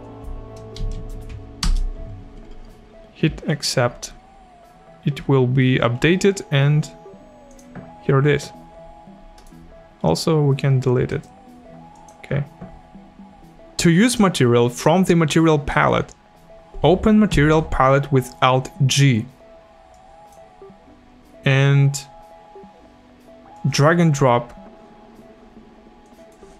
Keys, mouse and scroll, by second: 0.8 Right, 1.0 space, 1.7 Return, 1.7 KP_Enter, 3.5 click, 7.5 click, 9.4 right click, 11.1 click.